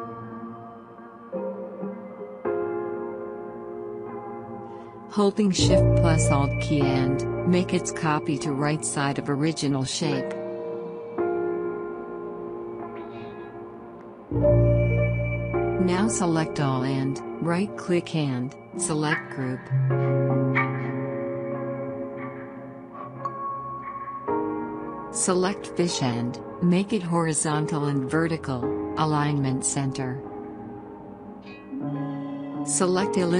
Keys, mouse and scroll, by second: 4.8 click, 6.9 click, 7.1-18.3 drag, 18.3 right click, 20.0 click, 22.2 click, 25.3 click, 33.0 right click.